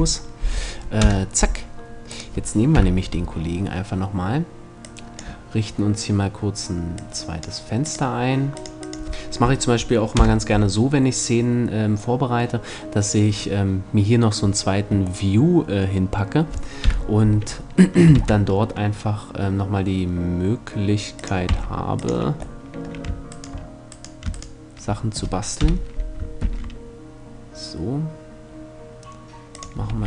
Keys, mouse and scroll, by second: 0.3-1.8 middle drag, 0.6 KP_0, 1.8 right click, 2.4 KP_7, 4.4 click, 9.8 KP_0, 16.4 KP_7, 17.8 shift+d, 20.9 click, 21.1 x, 24.8 right click, 25.2 KP_7, 26.1 shift+d, 29.4-30.0 drag, 29.5 r.